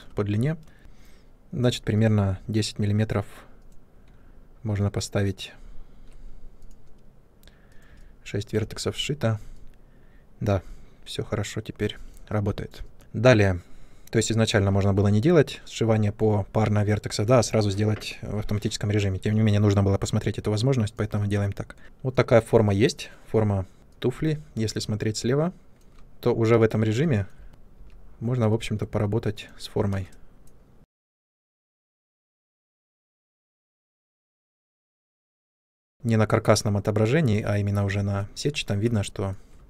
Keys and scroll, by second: 8.5 Tab, 13.0 Tab, 21.8 Tab, 23.8 ctrl+space, 26.0 Tab, 27.5 1, 29.8 space, 31.4 space, 35.6 space, 35.9 w.